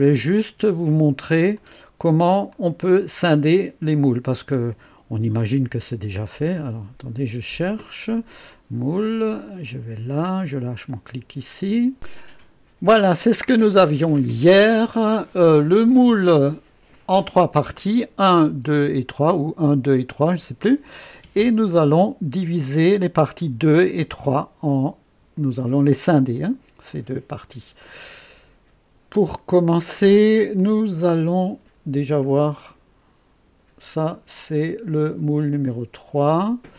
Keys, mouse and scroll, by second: 1.5 click, 2.5-3.3 drag, 4.3 click, 6.5 click, 8.5-11.2 drag, 30.5 click, 32.6 click.